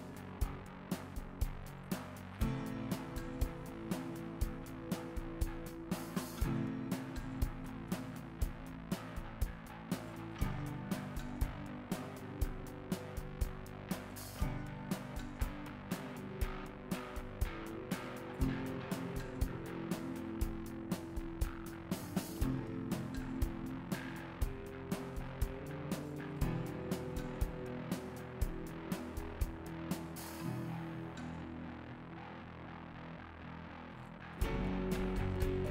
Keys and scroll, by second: 3.7 s, 7.1 ctrl+z, 8.5 s.